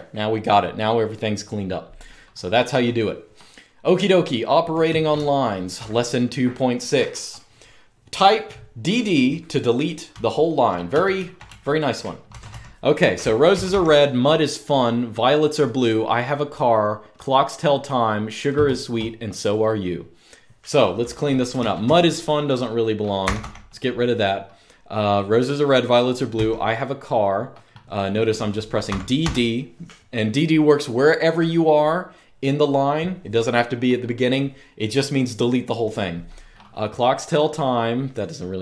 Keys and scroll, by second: 3.6-5.7 typing, 9.8-12.2 typing, 13.2 typing, 21.3 typing, 22.9 typing, 26.1 typing, 28.6-28.9 typing.